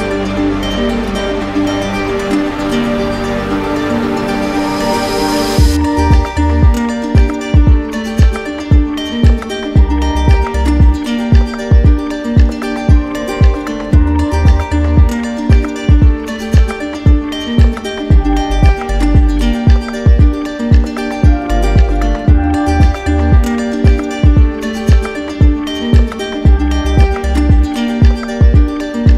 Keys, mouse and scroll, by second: 2.2 ctrl+click, 2.6 ctrl+click, 3.3 r, 6.9 alt+click, 11.9 click, 12.4 ctrl+click, 12.7 q, 13.4 click, 14.8-15.9 drag, 17.4-18.5 drag, 18.6-19.7 drag, 19.5 d, 21.8-23.6 drag, 23.0 ctrl+d, 23.5 ctrl+d, 24.4-25.4 drag, 26.8 click, 28.1 click.